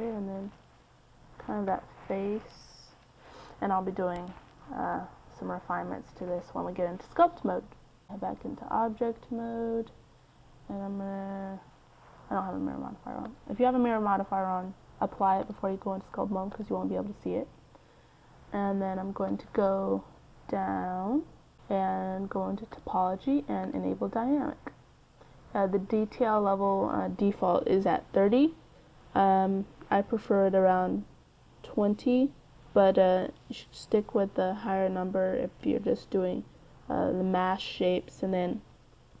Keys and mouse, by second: 0.1 d, 0.3-2.5 drag, 1.0-6.2 d, 2.7 click, 4.6 click, 6.3 click, 7.8-9.8 drag, 11.9 click, 16.8-18.3 drag, 18.9 click, 20.0 click, 22.3-25.2 drag, 26.1-28.8 drag, 32.7-34.1 drag, 34.1 middle click.